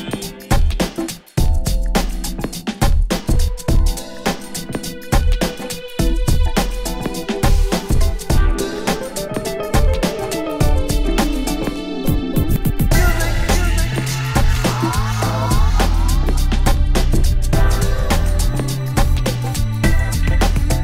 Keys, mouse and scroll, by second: 3.1 shift+a, 8.0 click, 9.2 click, 10.7 click.